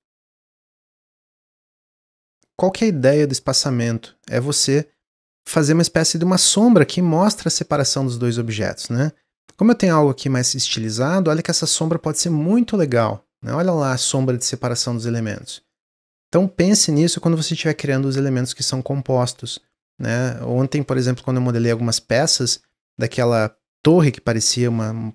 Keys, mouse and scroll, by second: 0.7 click, 1.3-1.8 middle drag, 1.8 click, 2.2-2.9 middle drag, 2.9 click, 7.6 click, 9.7 g, 10.9 drag, 11.2-14.4 middle drag, 15.3 click.